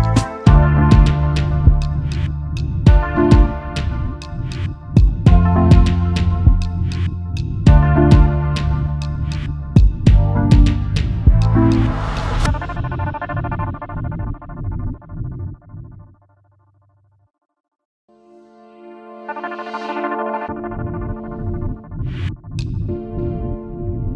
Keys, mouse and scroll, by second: 1.6-2.1 alt+scroll down 1, 2.1 space, 2.2 double click, 2.9 alt+scroll up 1, 4.9 e, 9.9 v, 10.5 alt+scroll down 1, 10.8 alt+click, 11.0 space, 11.5 alt+scroll up 1, 17.3-19.7 scroll up 1, 19.7 typing, 20.7 typing.